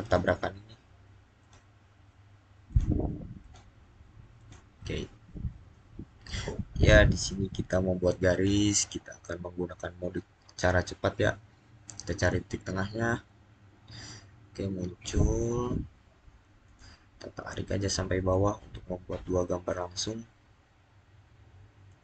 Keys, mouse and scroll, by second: 8.2 click, 16.5 click, 21.7 click.